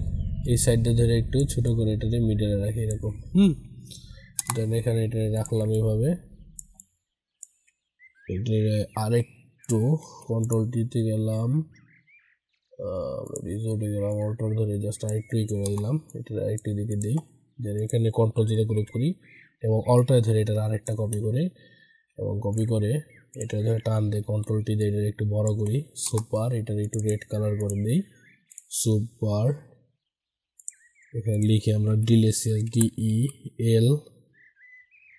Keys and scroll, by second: 10.0 ctrl+t, 18.4 ctrl+g, 23.8 ctrl+t, 31.6 ctrl+a.